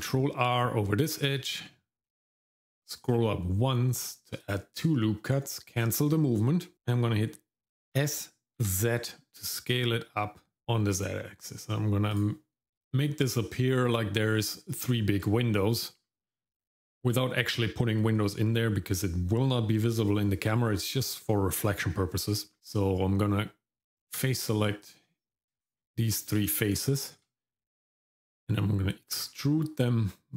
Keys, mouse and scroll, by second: 8.0 s, 13.9 shift+middle click, 14.9 shift+middle click, 23.0 Tab, 24.8 click, 25.6 shift+click, 26.1 shift+click, 27.0 shift+middle click, 29.2 e.